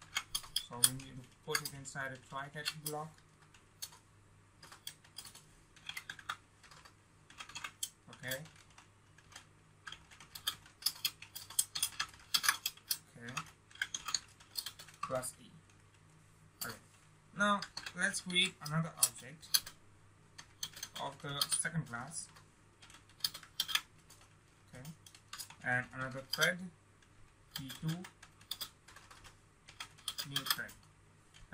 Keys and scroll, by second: 2.6 Tab, 12.2 ctrl+space, 23.4 ctrl+v, 30.0 ctrl+space.